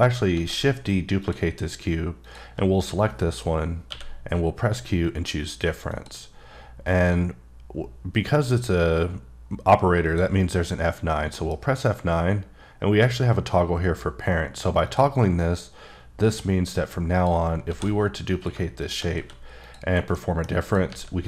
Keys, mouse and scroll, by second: 0.3 shift+d, 1.2 shift+click, 3.9 q, 5.9 click, 10.0 click, 11.3 F9, 14.8 click, 17.2 click, 17.6 shift+d, 18.3 click, 19.1 q, 19.6 click, 20.1 middle click, 20.6 click, 20.9 g.